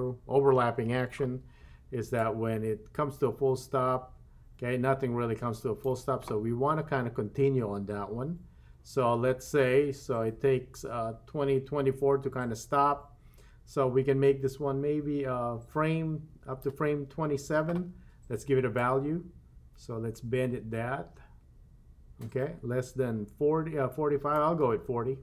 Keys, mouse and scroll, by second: 2.2-5.9 drag, 9.5-16.7 drag, 18.8-24.3 drag.